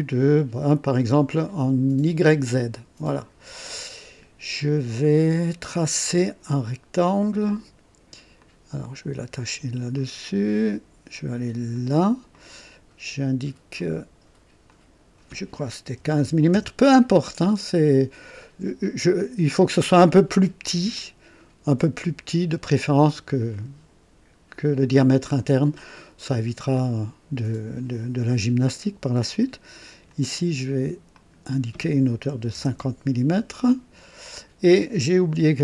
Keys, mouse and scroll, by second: 2.2 click, 3.1 click, 8.4 click, 9.9 click, 11.7 click, 12.3 right click, 13.8 click, 14.7 click, 16.0 KP_1, 16.2 KP_5, 16.5 Return, 21.0-21.9 ctrl+alt+drag, 26.7 click, 29.8 click, 31.1 click, 32.3-33.0 typing, 32.8 KP_Enter, 35.5 &.